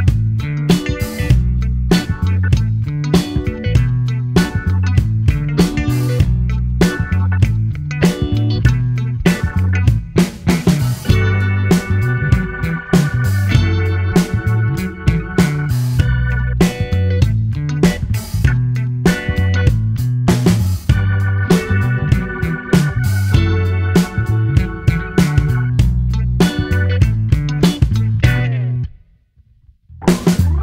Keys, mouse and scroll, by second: 0.1 middle click, 0.7 space, 2.5 space, 2.7 middle click, 3.2 space, 3.8 space, 4.5 click, 4.9 space, 5.7 space, 5.9-7.3 middle drag, 7.3 click, 12.1 click, 13.1 click, 15.9 click, 17.1 click.